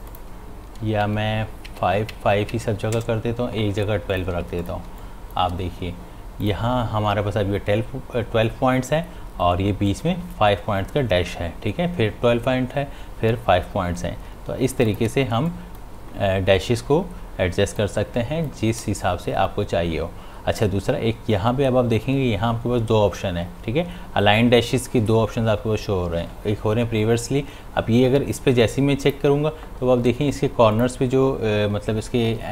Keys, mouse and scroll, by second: 1.0 Tab, 4.1 click, 4.3 space, 4.6 ctrl+click, 4.9 ctrl+space, 5.0 click, 5.4 space, 6.4 click, 14.6 space, 14.9 ctrl+alt+click, 15.4 space, 15.5 click, 15.9 space, 17.8 click, 18.1 space, 29.0 click.